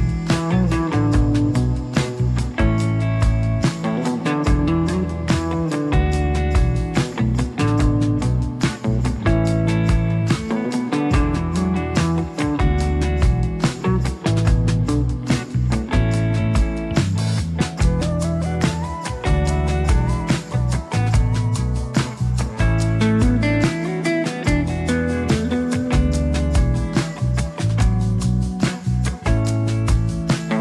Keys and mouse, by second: 0.0 r, 2.2 Tab, 2.5 s, 4.0 r, 5.4 f, 5.6 click, 7.3-9.6 drag, 9.9 Tab, 10.2 click, 11.0 g, 14.3 g, 15.6 click, 15.6 ctrl+KP_1, 15.9 click, 17.1 f, 17.4 click, 18.1 ctrl+z, 18.2 ctrl+Tab, 18.2 g, 19.0 g, 19.8 4, 20.0 f, 20.2-21.3 drag, 21.5 middle click, 21.9 1, 22.0 click, 22.6 click, 22.9 click, 23.2 click, 23.4 click, 23.5 click, 23.8 middle click, 24.1 middle click, 24.4 f, 24.6 click, 24.9 click, 25.3 click, 25.6 f, 25.7 ctrl+z, 25.9 click, 27.7 ctrl+i, 28.1 click, 28.3 1, 28.3 f, 28.4 click, 28.6 click, 28.9 click, 29.1 click, 29.5 click, 30.0 click.